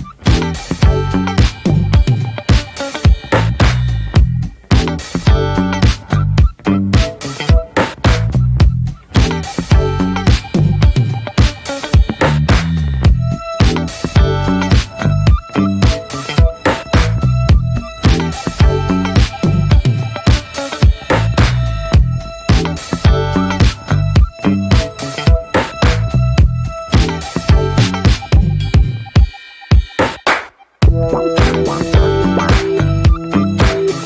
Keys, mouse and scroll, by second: 1.0 ctrl+s, 1.2-3.1 scroll up 6, 1.4 shift+middle click, 2.1 middle click, 2.4 Tab, 3.2 3, 3.5 click, 3.8 alt+middle click, 4.4 shift+middle click, 4.5-4.9 scroll up 2, 4.9 shift+middle click, 5.2-5.9 scroll up 1, 5.9-6.3 scroll up 1, 6.3 e, 12.8-13.6 scroll down 3, 12.9 Tab, 13.0 click, 13.6-14.2 shift+middle drag, 14.2 ctrl+s, 14.5 middle click, 14.9 click, 15.2 shift+a, 16.2 alt+middle click, 17.2 click, 18.2 shift+middle click, 18.3 scroll up 2, 18.8 shift+middle click, 18.9-19.2 scroll up 1, 19.9 s, 21.6 click, 23.0-24.1 middle drag, 24.1 Tab, 24.3 Tab, 24.6 click, 24.8 ctrl+s, 25.0 click, 26.0 n, 26.2 scroll down 1, 26.4-27.3 middle drag, 27.3 drag, 27.7-28.1 middle drag, 28.1 n, 30.2-31.0 middle drag, 31.0 click, 31.6 middle click, 32.4 click, 32.7-34.0 middle drag.